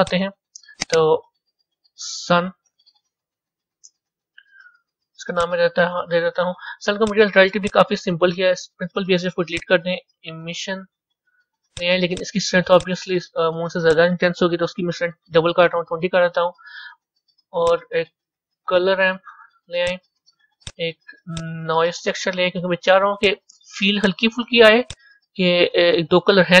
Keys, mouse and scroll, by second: 0.0 click, 0.7 click, 0.8-4.9 drag, 7.5 click, 8.5 Delete, 10.6 shift+a, 13.2-17.6 drag, 17.6 shift+a, 21.9 shift+a, 25.4-26.6 drag.